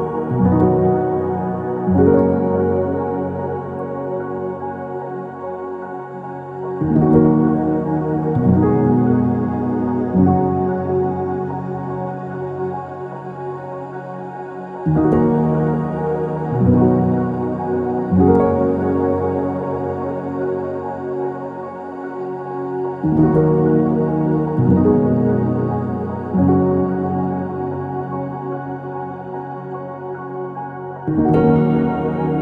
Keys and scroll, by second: 1.0-2.0 typing, 3.4 Escape, 4.1 typing, 4.3 Return, 6.2 ctrl+z, 12.0-12.9 typing, 15.2 ctrl+z, 23.3 ctrl+s, 26.0-26.9 typing.